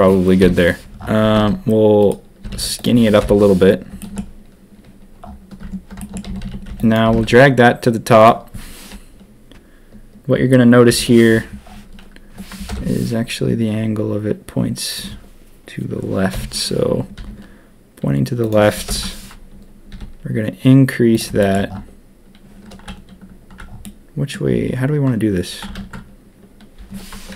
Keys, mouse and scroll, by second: 0.4 KP_7, 1.2 s, 2.4 s, 3.2 ctrl+KP_1, 4.0 shift+middle click, 5.6 Tab, 5.9 shift+click, 6.2 a, 6.4 a, 6.6 b, 7.0 g, 10.8 KP_7, 12.7 ctrl+KP_1, 16.3 KP_7, 17.1 r, 18.8 ctrl+KP_1, 19.9 s, 21.4 shift+middle click, 23.8 click, 25.7 ctrl+z, 27.3 KP_7.